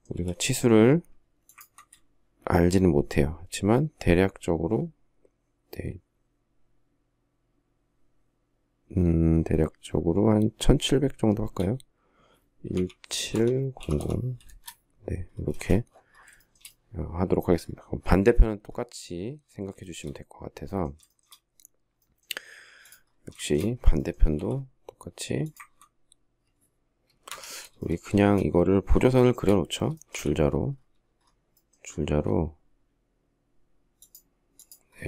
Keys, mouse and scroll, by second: 0.0 m, 1.4 ctrl+click, 3.1 shift+scroll, 12.5-14.2 typing, 15.3 space, 16.2 shift+middle click, 19.6 shift+middle click, 20.9 shift+middle click, 23.1 shift+scroll up 1, 23.2 shift+middle click, 24.1 m, 27.1 Escape, 28.0 space, 28.9 shift+middle click, 29.9 t.